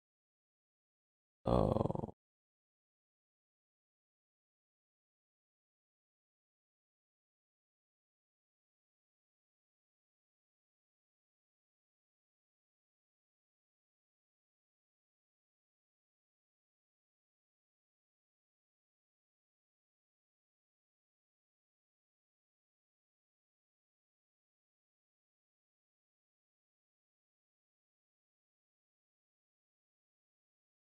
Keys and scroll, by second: 3.0 alt+q, 6.1 alt+q.